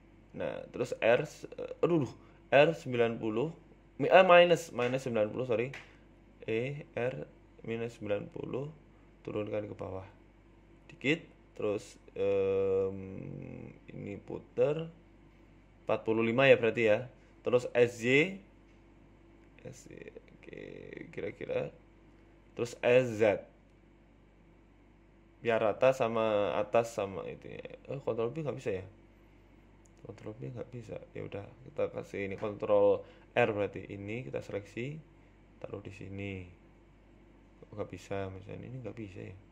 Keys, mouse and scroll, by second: 0.0 ctrl+z, 0.4 g, 1.3 e, 2.3 e, 4.3 r, 6.1 g, 6.8 ctrl+z, 7.0 ctrl+z, 7.2 ctrl+z, 8.3 r, 10.3 e, 12.7 click, 13.7 click, 15.2 r, 17.5 s, 19.8 scroll up 4, 19.9 shift+middle click, 20.3-21.4 scroll up 2, 20.6 s, 24.8 g, 25.7 s, 28.5 ctrl+b, 31.1 ctrl+b, 31.9 ctrl+r, 33.1 ctrl+t, 33.7 ctrl+r, 34.5 click, 35.4 alt+shift+Right, 35.6 a, 35.9 alt+shift+right click, 36.4 g, 38.4 ctrl+b.